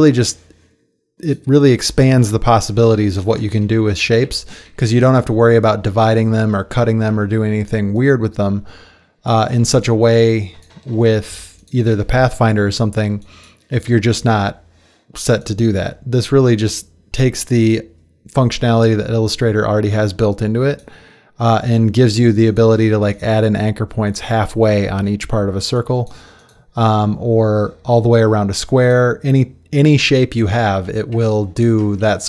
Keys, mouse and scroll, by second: 4.1 ctrl+z, 4.3 ctrl+z, 4.7 ctrl+z, 5.1 ctrl+z, 6.0 ctrl+z, 6.8 ctrl+z.